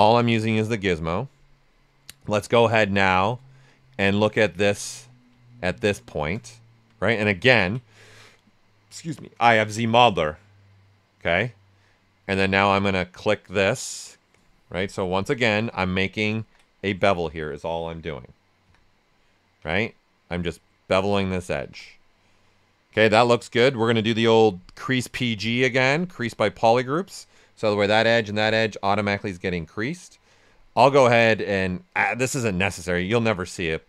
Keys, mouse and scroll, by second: 0.0 alt+right click, 0.2 right click, 1.5 click, 3.6 click, 4.5 shift+d, 5.0 right click, 5.4 ctrl+right click, 6.1 shift+f, 6.5 alt+right click, 12.4-15.1 drag, 16.3 z, 18.6 z, 20.3 ctrl+click, 20.7 click, 21.6 shift+d, 21.9-23.9 right drag, 23.9-25.8 drag, 25.8 click, 28.8-30.7 right drag, 30.7 space, 33.6 click.